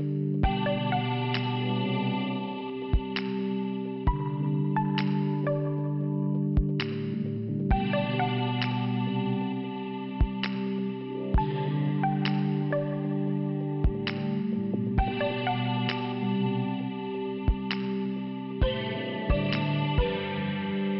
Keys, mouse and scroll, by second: 0.7 click, 7.2 click, 7.4 click, 8.7 f, 10.1 middle click, 11.0 scroll up 1, 11.9 scroll up 1, 13.0 click, 13.9 click, 14.0 click, 15.1 click, 15.2 click, 16.0 click, 19.1 click, 19.3 click, 19.4 click, 19.5 click, 20.3 click, 20.6 click.